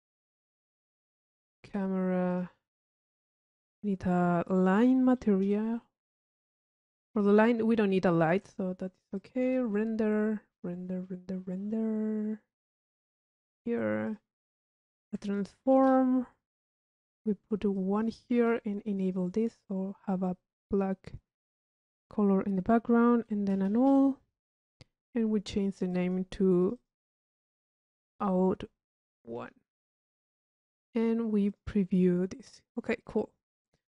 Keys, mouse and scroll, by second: 0.2 click, 1.3 Tab, 1.6 click, 1.6 c, 2.3 click, 3.1 click, 3.7 Tab, 4.7 click, 5.4 i, 6.5 click, 7.4 click, 8.2 click, 9.2 click, 10.2 click, 13.4 click, 14.8-15.4 drag, 15.2 Tab, 16.3-17.2 drag, 17.8 drag, 19.4 click, 20.8-23.6 drag, 23.7 u, 24.6 click, 25.5 click, 26.6 click, 31.5 click, 32.4 drag, 33.8-33.9 drag.